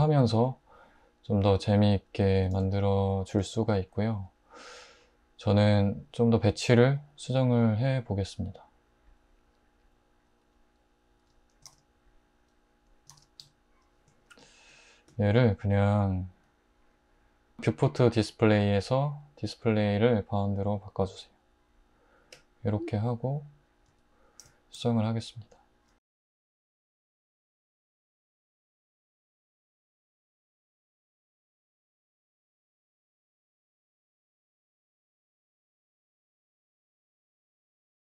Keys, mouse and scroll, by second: 11.2 Tab, 11.7 alt+z, 13.1 alt+z, 13.4 Tab, 14.3 alt+h, 26.0 Tab, 26.3-32.0 typing, 31.9 Tab, 35.7-38.0 typing, 36.7 Tab.